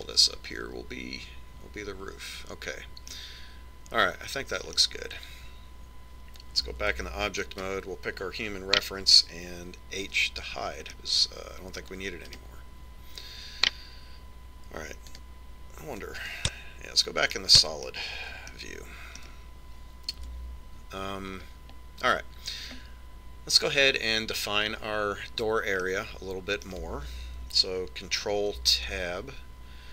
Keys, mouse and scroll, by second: 4.3-6.2 middle drag, 8.1 Tab, 11.5 h, 12.8-14.2 middle drag, 13.6 right click, 13.9 click, 14.1 right click, 16.4 click, 18.7-21.7 middle drag, 21.7 Tab, 22.6 middle click, 27.2-29.0 middle drag, 29.8 ctrl+Tab.